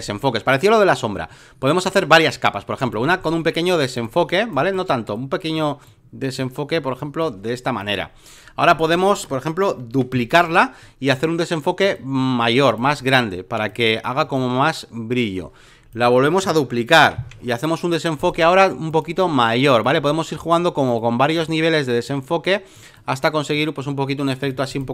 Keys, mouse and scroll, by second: 9.9 ctrl+j, 11.1-16.4 drag, 17.0 ctrl+j, 18.2-24.9 drag.